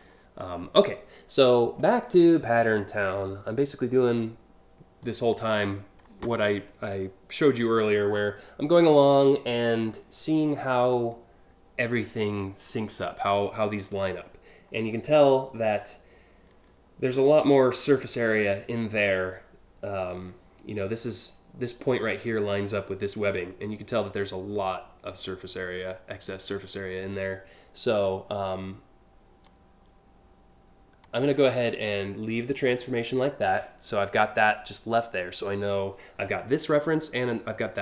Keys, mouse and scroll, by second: 1.9-4.6 drag, 6.5-9.3 drag, 14.3-14.8 scroll down 2, 29.0-30.6 drag, 32.1 click.